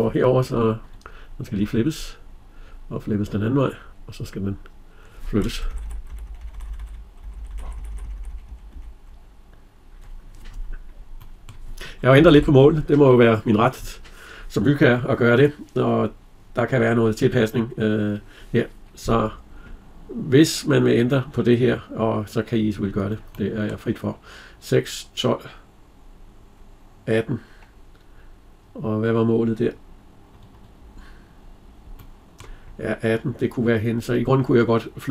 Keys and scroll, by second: 5.4 Left, 12.0 Escape.